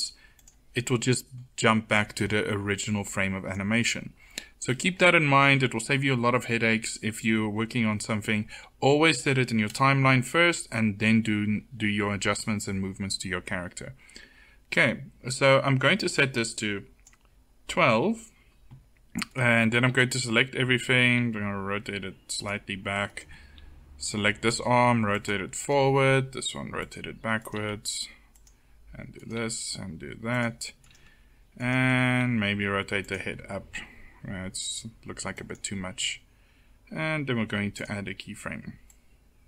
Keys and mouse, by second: 1.8 click, 2.7-11.4 drag, 15.9-17.7 drag, 19.5 a, 19.7 a, 21.0 r, 23.4 r, 25.7 r, 27.4 r, 29.2 r, 32.1 r, 33.6 r, 37.6-39.4 drag.